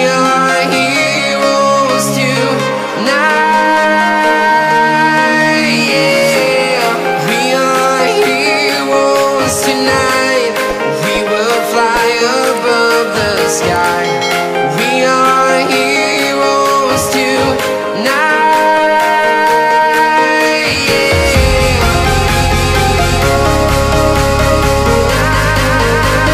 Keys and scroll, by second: 17.6 ctrl+e, 19.1 ctrl+shift+a.